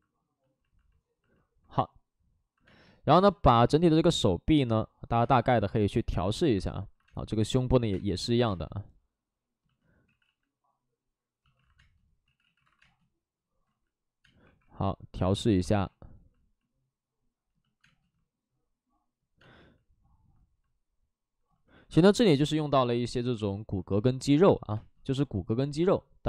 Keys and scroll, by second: 0.4 space, 0.9 alt+s, 3.1 space, 5.1 space, 6.8 alt+s, 6.8 2, 7.0 space, 7.7 5, 10.0 ctrl+z, 10.0 space, 11.5 ctrl+z, 11.5 alt+s, 11.7 space, 12.2 ctrl+z, 12.5 alt+s, 12.7 space, 13.6 ctrl+z, 14.2 space, 14.3 1, 15.3 ctrl+z, 15.7 2, 17.8 space, 21.1 space, 21.6 alt+s, 24.7 space, 25.5 1.